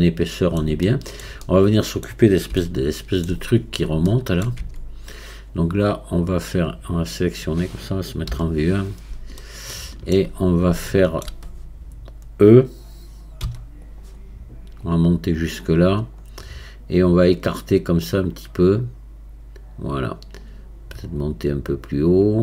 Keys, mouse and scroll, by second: 1.5-3.7 middle drag, 3.7 scroll up 3, 4.1 shift+middle click, 4.7 Tab, 9.4-10.5 shift+middle drag, 10.5-10.9 scroll up 3, 10.9-13.5 shift+middle drag, 13.5 e, 14.9-20.4 drag, 21.2-22.4 drag.